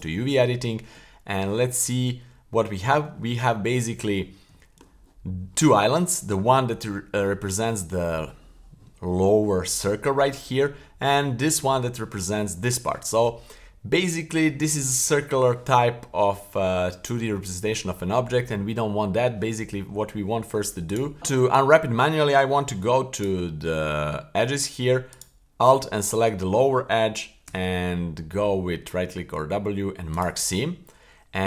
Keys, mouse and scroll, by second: 0.0-1.2 drag, 0.0-1.2 scroll up 2, 1.2 a, 2.0 a, 3.2 shift+middle click, 3.7-4.5 scroll up 1, 4.5 scroll up 1, 4.6 shift+middle click, 5.2-6.2 scroll down 1, 6.6-7.3 middle drag, 10.0 middle click, 10.7-12.1 scroll down 2, 12.1 middle click, 13.4-14.0 scroll up 3, 14.1 shift+middle click, 19.7-20.2 scroll up 2, 20.2-20.7 middle drag, 20.9 right click, 21.2 super+z, 21.2 middle click, 21.4 scroll down 1, 21.8-22.4 middle drag, 23.1 right click, 24.0 Tab, 25.1 alt+right click, 25.8-26.1 middle drag, 27.4 w.